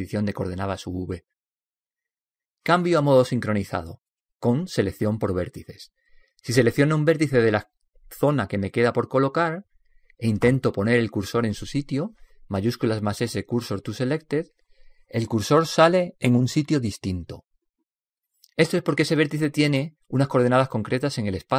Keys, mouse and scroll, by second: 4.2 click, 6.0 click, 9.7 right click, 13.1 shift+s.